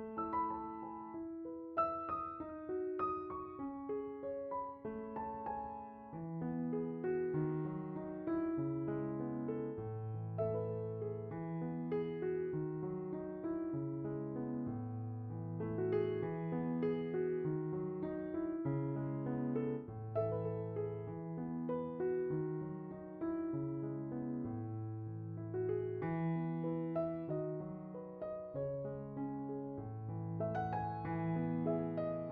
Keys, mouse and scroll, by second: 0.9 scroll, 1.3 middle click, 6.6 drag, 7.4 scroll up 6, 7.8 drag, 8.7 drag, 9.4 click, 9.6 click, 9.8 click, 10.2 click, 10.3 KP_0, 10.8 KP_0, 11.5 drag, 12.0 drag, 13.3 click, 13.4 KP_0, 14.2 click, 14.3 KP_0, 14.8 click, 14.8 KP_0, 15.6 click, 16.2 click, 16.6 drag, 17.2 click, 17.6 click, 18.2 click, 18.8 click, 19.5 drag, 19.9 click, 20.5 click, 21.5 middle click, 21.5 scroll, 22.7 shift+a, 27.9 click, 28.6 click, 30.5 click, 30.8 click.